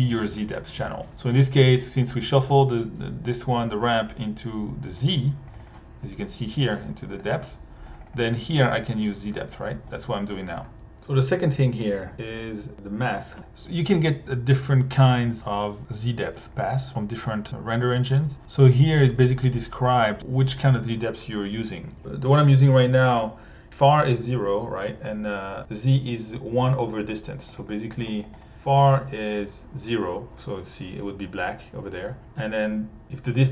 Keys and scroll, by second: 28.0 1.